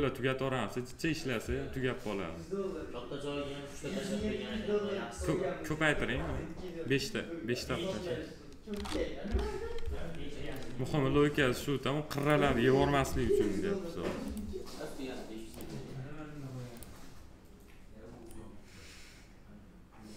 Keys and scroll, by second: 9.0 p, 12.8 alt+r.